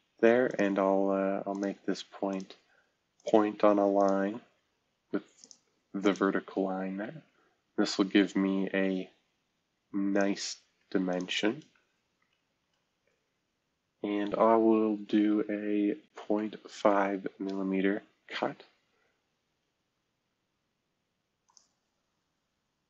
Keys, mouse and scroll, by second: 12.4 shift+v, 16.0-16.3 typing, 17.1 Return, 21.4 click.